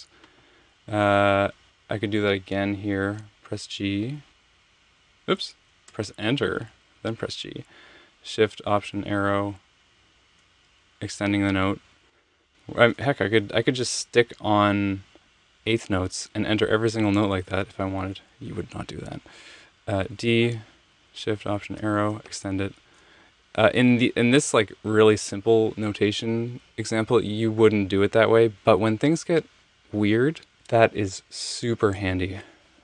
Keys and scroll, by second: 3.5 g, 5.9 Return, 6.7 g, 9.1 alt+shift+Right, 9.8 alt+shift+Right, 19.5 d, 21.6 alt+shift+Right, 24.5 Return.